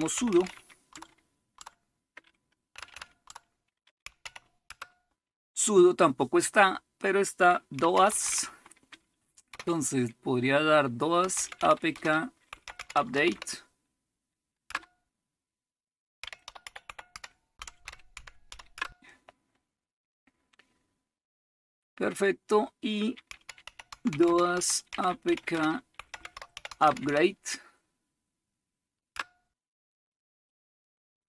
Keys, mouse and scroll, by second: 0.0-0.9 typing, 1.5 Tab, 2.7-4.7 typing, 3.3 Tab, 7.5-9.5 typing, 11.0-14.7 typing, 16.0-19.6 typing, 23.1-27.6 typing, 29.1 Return.